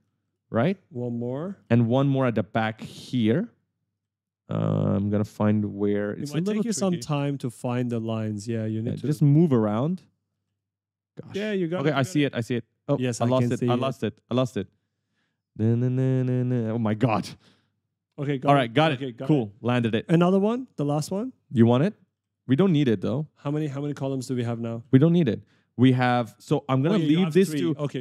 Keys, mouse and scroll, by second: 0.0-1.7 typing, 3.2 right click, 3.2 w, 4.1 d, 6.9 a, 7.1 a, 7.8 right click, 8.4-11.0 typing, 8.6 right click, 16.7 right click, 17.2-17.9 typing, 18.4 click, 18.8 right click, 19.1-21.0 typing, 22.2 right click, 22.3 w, 23.0 d, 23.3 right click, 24.2 right click, 24.3 a, 24.6 d, 25.3 a, 25.5 a, 26.7 right click.